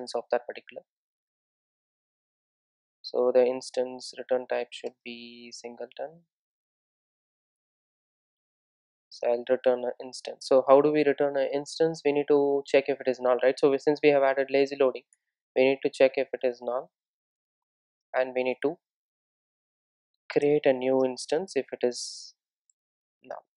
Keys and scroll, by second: 0.8 Return, 7.6 Return, 15.2 Return.